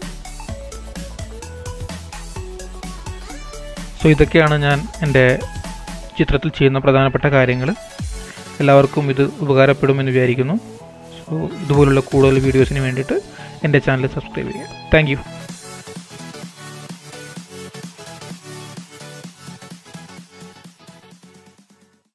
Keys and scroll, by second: 0.1 super+-, 9.8 super+s.